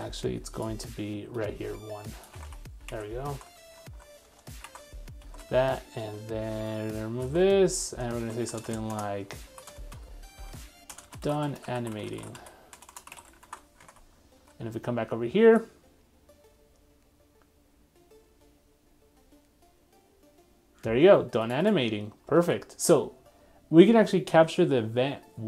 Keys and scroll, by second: 2.3 super+c, 2.5 super+Tab, 2.9 super+v, 3.3 super+z, 4.8 super+v, 7.4 super+x, 13.5 super+s, 22.4 super+Tab.